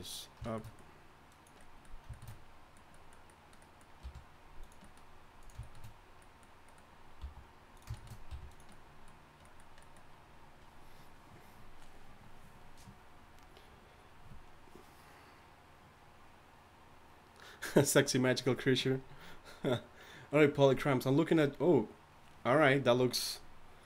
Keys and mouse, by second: 4.6 r, 7.2 g, 8.5 r.